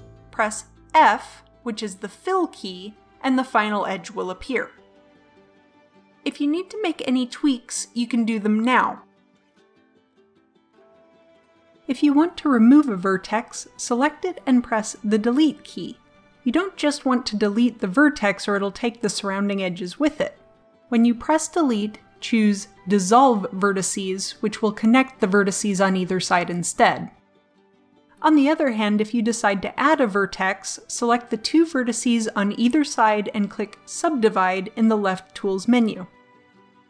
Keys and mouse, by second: 0.2 f, 5.6 a, 5.8 right click, 6.7 right click, 7.4 click, 7.4 right click, 8.1 click, 8.1 right click, 8.7 right click, 9.3 right click, 9.7 right click, 10.0 right click, 10.1 click, 10.4 click, 10.9 click, 15.9 Delete, 20.8 ctrl+z, 22.0 Delete, 30.8-32.3 drag, 33.3-35.0 drag, 36.1 a.